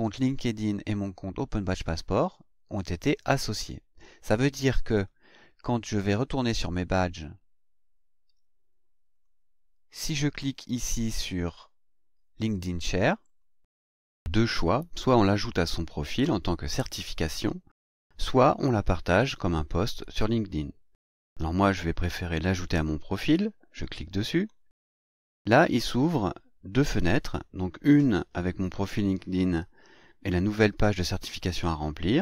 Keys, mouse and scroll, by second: 7.0 click, 9.1 click, 13.2 click, 24.3 click.